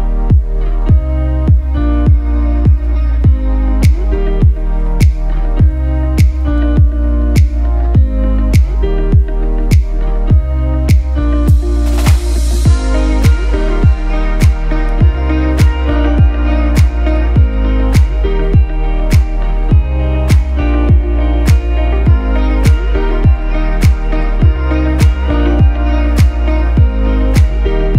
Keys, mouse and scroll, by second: 7.5-9.0 scroll down 1, 9.0 click, 10.0 ctrl+c, 10.5 ctrl+f, 11.7-18.2 shift+drag, 18.2-22.6 alt+shift+drag, 24.0 ctrl+a.